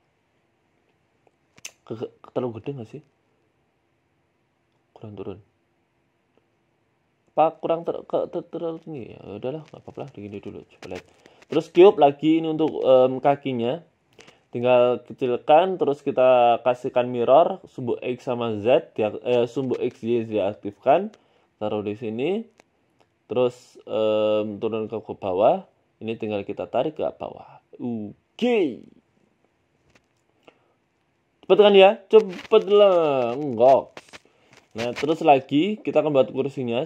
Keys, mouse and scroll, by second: 0.5 s, 1.2 s, 2.5 middle click, 3.8 s, 4.7 g, 5.6 middle click, 6.5 KP_7, 6.9 scroll down 2, 7.2 shift+middle click, 7.5-7.9 scroll up 4, 8.2 shift+s, 9.1 shift+a, 9.9 shift+a, 11.3 ctrl+z, 11.5 shift+a, 12.7 s, 13.5 z, 14.1-14.4 scroll up 3, 14.4 shift+middle click, 14.7 s, 15.5 click, 18.1 Tab, 18.1 click, 18.6 g, 19.9 s, 21.2 g, 23.1 KP_3, 23.8 shift+middle click, 24.6 Tab, 24.8 g, 26.2 Tab, 26.5 click, 27.2 g, 28.1 Tab, 28.3 middle click, 28.7 z, 29.3 scroll down 1, 29.5 middle click, 29.5-30.0 scroll down 2, 29.7 middle click, 30.1 a, 30.2 a, 30.4 middle click, 30.9 scroll down 1, 31.0 middle click, 31.7 middle click, 32.3 scroll up 2, 32.5 middle click, 33.4 KP_3, 34.0 Tab, 34.5 Tab, 34.9 shift+right click, 35.7-36.1 scroll down 10, 35.9-36.6 scroll up 5, 36.6 shift+d.